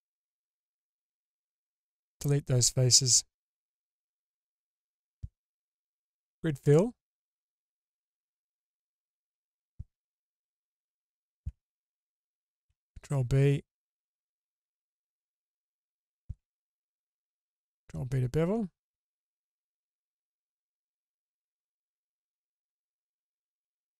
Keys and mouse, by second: 0.8 x, 3.4 2, 5.9 q, 7.2 click, 8.9 alt+click, 12.7 ctrl+b, 15.7 alt+click, 17.1 ctrl+b, 19.6-20.2 middle drag, 20.7 middle click, 22.7-23.9 middle drag.